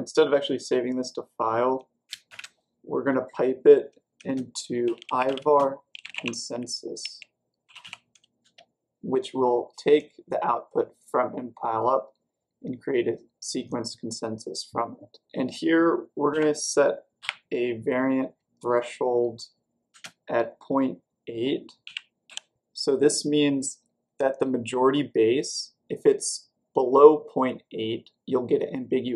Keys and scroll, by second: 2.2 typing, 4.1-8.4 typing, 16.9-17.6 typing, 21.8-22.7 typing.